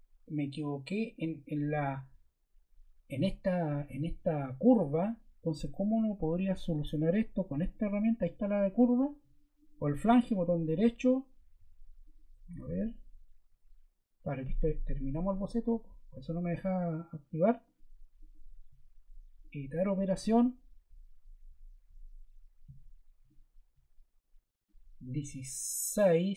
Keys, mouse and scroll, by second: 6.3 Escape, 7.5 click, 8.3 click, 9.5 click, 10.1 click, 11.3 Escape, 11.5 Escape, 12.0 click, 12.3 Escape, 12.5 Escape.